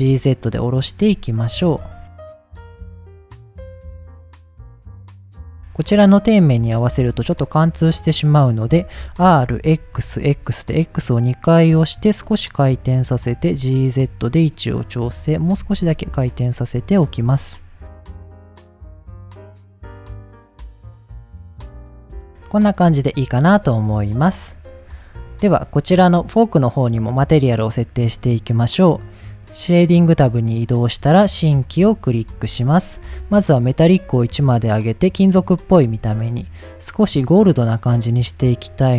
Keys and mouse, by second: 0.7 click, 1.6 KP_1, 2.2 shift+middle click, 2.4 g, 2.4 z, 2.7 click, 3.1 middle drag, 3.6 g, 4.3 z, 4.4 click, 4.6-5.3 middle drag, 6.8-7.2 shift+middle drag, 7.7 middle click, 8.8 r, 9.6 x, 10.2 x, 12.9 click, 13.4 g, 13.4 z, 14.7 click, 15.0 r, 15.4 x, 15.6 x, 16.6 click, 17.2 middle click, 18.0 middle click, 18.2 g, 18.6 g, 18.7 y, 19.2 click, 19.4 middle click, 20.2 middle click, 20.7 r, 20.8 x, 20.9 x, 21.5 click, 21.8 middle click, 22.1 middle click, 22.3 middle drag, 22.8-23.1 middle drag, 23.2 middle click, 24.5 click, 25.0-25.4 middle drag, 25.8 click, 27.0 click, 27.8 click, 29.8 click, 30.8 click, 31.3 middle drag, 31.9 shift+middle click, 32.6 shift+middle click, 33.5-34.0 drag, 34.4 drag, 34.9 middle click, 35.7 shift+middle click, 36.3 click.